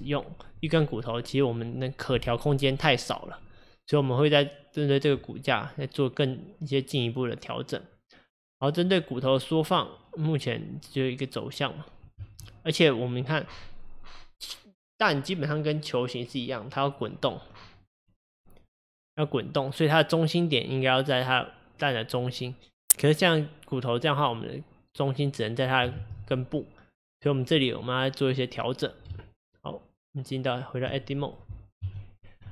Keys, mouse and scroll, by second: 9.8 click, 12.2 ctrl+z, 24.4 click, 26.0 ctrl+z, 29.2 Tab, 31.2 click, 31.8 KP_1.